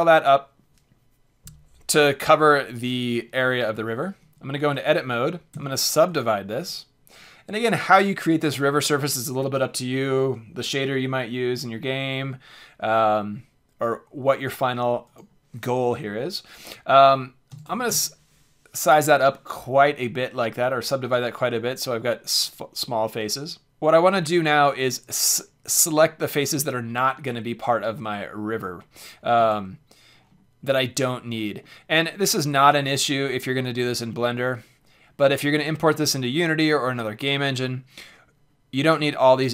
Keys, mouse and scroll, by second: 4.2 Tab, 5.5 w, 10.6-12.4 drag, 15.0-16.9 drag, 29.3 c.